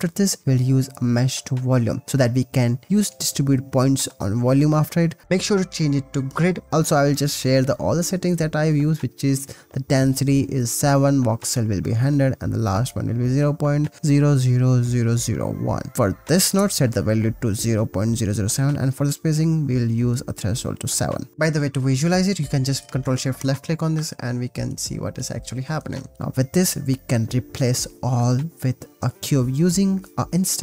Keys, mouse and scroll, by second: 2.7 click, 4.5 ctrl+s, 6.2-7.7 drag, 8.3 click, 9.5-13.1 drag, 13.1 0, 14.5-16.1 middle drag, 19.2 ctrl+s, 21.2 middle click, 21.4 middle click, 22.0 middle click, 23.7 ctrl+shift+drag, 25.0 middle click, 25.8 middle click, 26.1 shift+a, 29.4 shift+a.